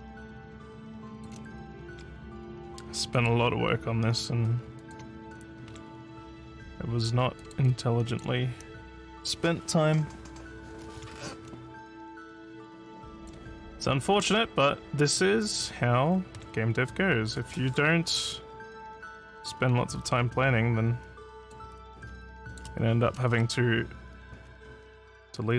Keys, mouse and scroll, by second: 0.0 scroll down 1, 1.1 shift+click, 3.1 click, 3.6 scroll down 2, 4.8 shift+click, 6.4 scroll up 1, 7.4 click, 8.1 shift+click, 13.2 click, 13.6 scroll up 1, 14.2 scroll down 3, 15.4 shift+click, 21.4 click, 22.5 shift+click, 24.4 scroll up 1.